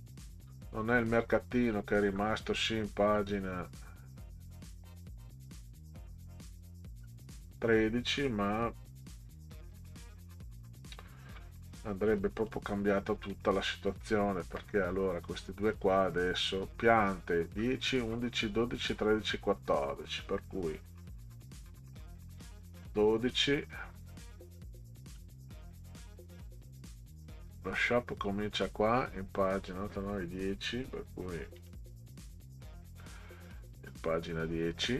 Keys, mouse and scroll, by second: 1.1-1.8 scroll up 4, 2.0 scroll down 2, 3.1 scroll up 2, 3.7 scroll up 2, 6.4 scroll up 2, 7.0-7.5 scroll down 4, 11.3 middle click, 12.4 click, 13.9 click, 17.6-18.2 scroll down 4, 20.5 scroll down 2, 22.4 click, 24.0-26.5 scroll up 12, 27.2-27.8 scroll up 4, 28.3-29.2 scroll down 6, 31.6 click, 33.5 click, 33.8-34.5 scroll down 4.